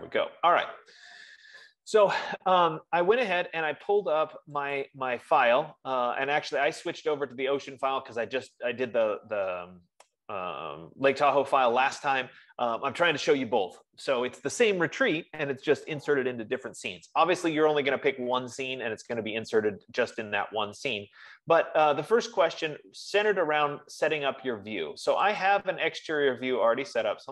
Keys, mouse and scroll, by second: 5.3 click, 6.1 F15, 9.2 click, 26.0 click.